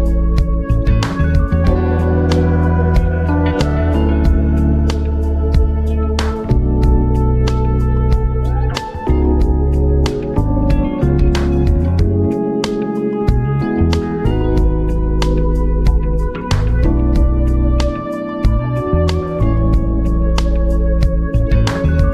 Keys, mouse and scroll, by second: 1.4 ctrl+t, 2.7-9.8 alt+drag, 9.8 shift+Up, 12.0-13.6 alt+drag, 13.6 Return, 14.7 v, 14.9 Up, 17.0 shift+Up.